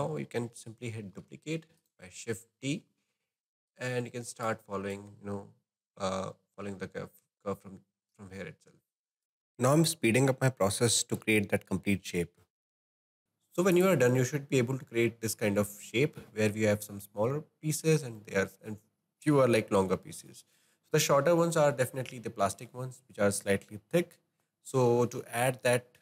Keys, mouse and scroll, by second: 1.2 shift+d, 3.6-7.9 drag, 9.2-10.4 scroll down 5, 9.3 shift+middle click, 9.5 click, 9.9 shift+middle click, 9.9 shift+middle click, 10.0 shift+d, 10.1 click, 10.4 shift+middle click, 10.4 shift+d, 10.5 middle click, 10.5 scroll up 2, 10.7 click, 11.3 middle click, 11.8 shift+d, 11.8 middle click, 11.9 click, 12.0 ctrl+z, 12.2 click, 12.4 shift+click, 12.6 middle click, 12.7 click, 13.1 scroll down 2, 13.2-13.8 shift+middle drag, 13.8 click, 14.2-23.9 middle drag.